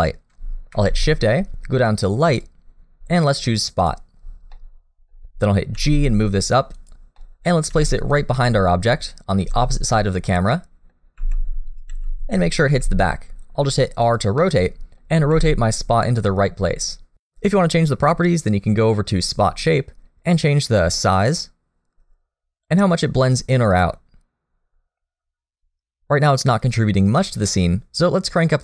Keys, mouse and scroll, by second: 0.7 shift+a, 4.5 middle click, 5.7 g, 7.2 middle click, 7.7 g, 8.4 middle click, 9.4 g, 10.5 middle click, 11.2 r, 11.9 g, 12.7 r, 14.4 middle click, 15.2 r, 16.2 middle click, 20.4 click, 23.5 click.